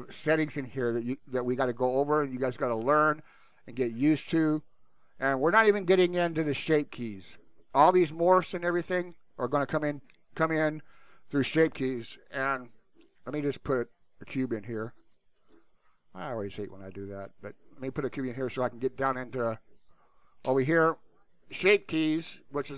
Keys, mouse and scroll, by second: 13.3 shift+a, 15.5 shift+a, 20.0 click.